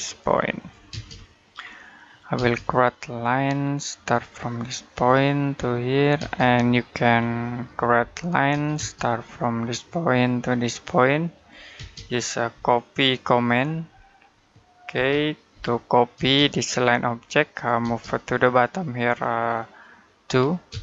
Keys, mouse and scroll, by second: 0.7 space, 1.1 middle click, 1.4-2.2 scroll up 1, 2.2 space, 4.7 click, 6.0 space, 6.5 middle click, 7.0-7.8 scroll up 1, 7.8 l, 8.6 space, 9.9 click, 11.6 space, 12.4 v, 14.1 Escape, 14.8-16.0 typing, 17.3 click, 17.7 space, 17.9 click, 20.1 2, 20.5 space.